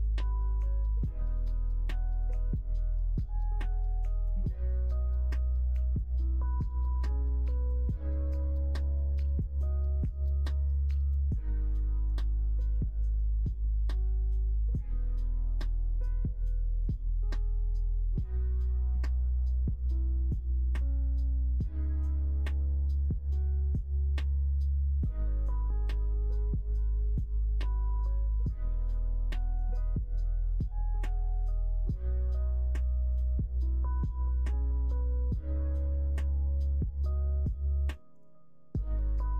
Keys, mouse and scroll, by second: 0.1 middle click, 1.0 middle click, 1.5 middle click, 2.6 click, 3.8 o, 5.1 g, 11.2 click, 11.7 shift+click, 12.4 alt+click, 12.7 shift+middle click, 13.2-14.2 middle drag, 14.6 e, 17.1 middle click, 18.0 shift+middle click, 18.6 middle click, 19.5 shift+middle click, 20.4 click, 21.3 shift+click, 22.4 click, 22.7 shift+click, 23.7 e, 26.1 ctrl+r, 28.8 click, 30.2 e, 34.5 ctrl+z, 35.8 e, 38.9 ctrl+r.